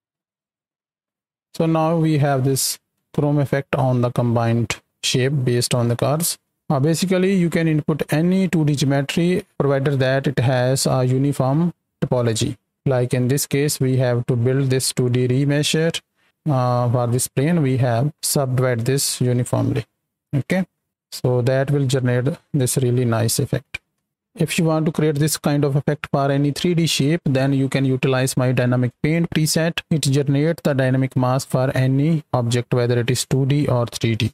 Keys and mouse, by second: 1.5 click, 2.4 space, 4.5-6.1 drag, 6.6 right click, 10.1 right drag, 14.6 click, 16.7 click, 19.3-20.3 drag, 20.5 space, 20.9-22.9 drag, 23.8 space.